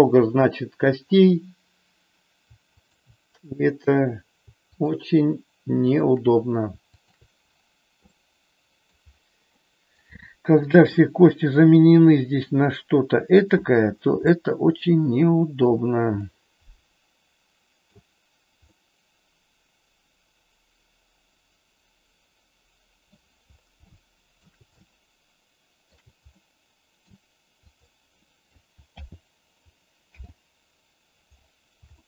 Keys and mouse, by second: 2.8 shift+click, 5.9 shift+click, 7.0 shift+click, 8.1 middle click, 9.5 middle click, 10.8 r, 13.2 click, 14.2-15.6 shift+middle drag, 16.2-17.9 middle drag, 18.8-23.1 middle drag, 23.8 shift+middle click, 24.8-25.9 shift+middle drag, 26.4 middle click, 27.8 click, 28.9 alt+g, 30.0 alt+r, 31.9 shift+middle click.